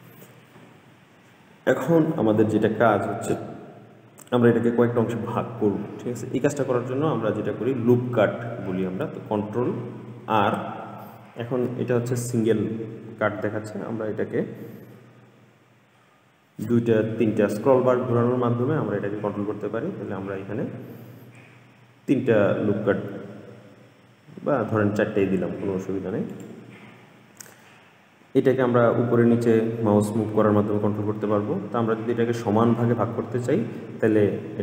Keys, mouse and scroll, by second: 10.4 ctrl+r.